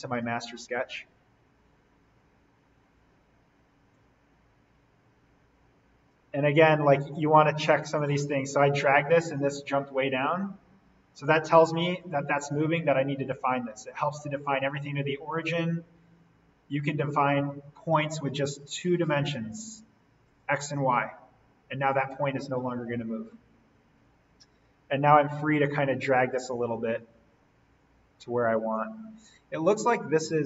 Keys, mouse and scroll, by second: 0.8 scroll up 1, 2.2-3.1 scroll down 1, 3.9-6.3 drag, 6.3 scroll up 1, 6.8-7.1 scroll down 1, 9.6 click, 12.5 d, 13.4 click, 22.7 Escape, 23.6-23.9 scroll up 1, 24.2-25.6 scroll down 1, 25.6 click, 29.0-29.7 scroll up 1, 29.7-30.4 scroll down 1.